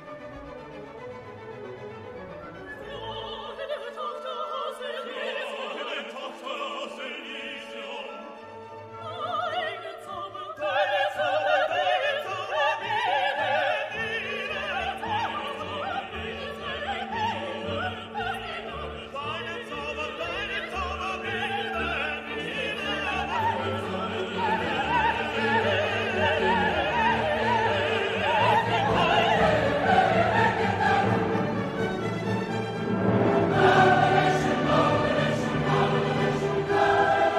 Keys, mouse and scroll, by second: 0.9 middle click, 2.4 click, 5.5 click, 11.5 click, 12.9 0, 13.6 click, 15.1 right click, 16.3 click, 17.2 click, 19.5 click, 21.8-23.5 drag, 23.8 right click, 25.6 click, 27.8 click, 29.4 click, 29.9 right click, 31.1 click, 32.2 click, 34.3 scroll down 2, 35.8 click.